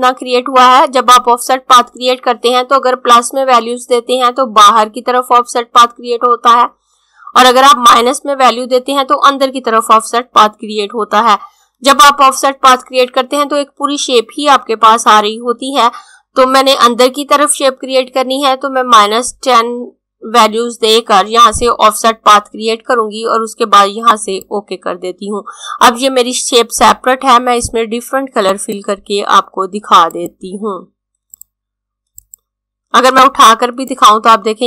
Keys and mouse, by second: 23.4 click, 27.8 click.